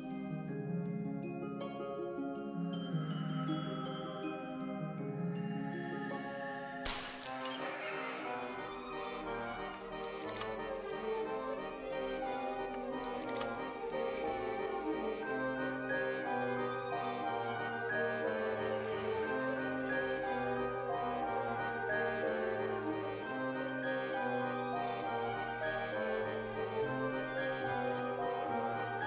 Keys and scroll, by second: 1.0 ctrl+c, 1.3 ctrl+v, 2.0 ctrl+c, 2.2 ctrl+v, 3.0 ctrl+c, 3.2 ctrl+v, 6.6 alt+x, 8.6 z, 10.4 ctrl+c, 10.7 ctrl+v, 12.2 ctrl+c, 12.4 ctrl+v, 13.2 ctrl+c, 13.4 ctrl+v, 14.0 ctrl+c, 14.2 ctrl+v, 15.1 z, 18.1 x, 20.6 ctrl+s, 21.7 ctrl+a, 23.1 ctrl+a, 24.5 space.